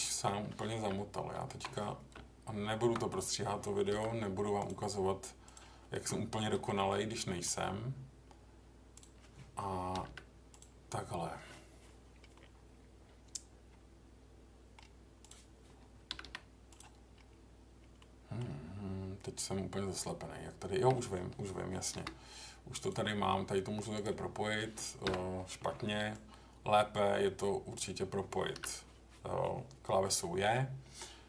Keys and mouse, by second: 2.1 Tab, 3.9 k, 6.6 middle click, 7.2 middle click, 8.9 click, 9.9 g, 10.0 g, 10.5 click, 12.3-14.7 middle drag, 16.1 g, 16.2 g, 16.7 click, 18.0 middle click, 21.9 k, 26.2-27.7 drag, 28.5 j, 30.2 middle click.